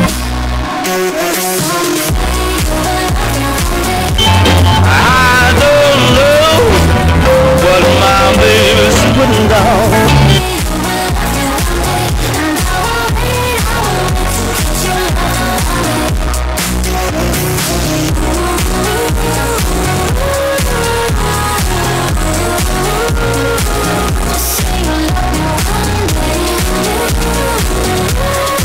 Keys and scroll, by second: 0.0 Page_Down, 11.0 Page_Down.